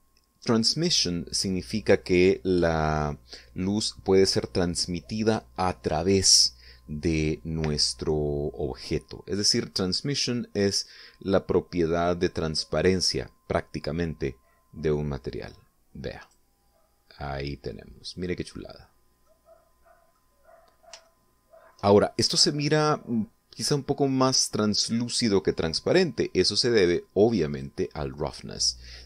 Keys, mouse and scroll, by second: 14.8-17.0 drag, 17.7-18.9 middle drag, 19.3 scroll up 1, 19.8-20.8 middle drag, 21.5 shift+middle click, 28.0 click.